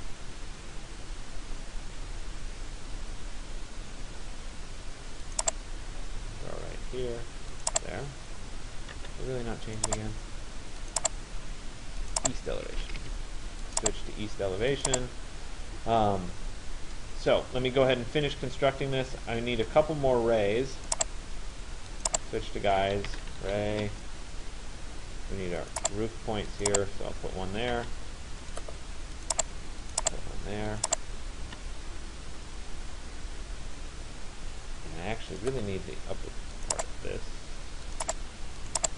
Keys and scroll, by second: 8.6 Return, 12.7 Escape, 22.6 r, 23.8 Return, 27.4 Return.